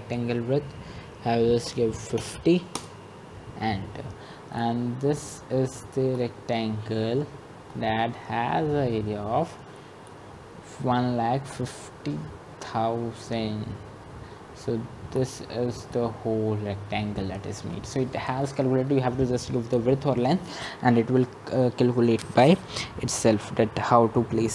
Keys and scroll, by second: 2.1 Return, 2.8-3.6 typing.